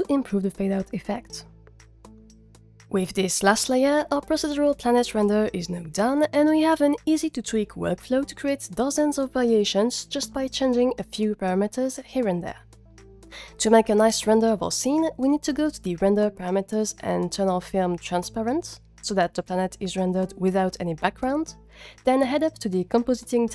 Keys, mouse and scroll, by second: 0.3 click, 0.9 click, 1.3 click, 15.8 click, 17.6-18.3 scroll down 7, 18.0 drag, 20.4 click.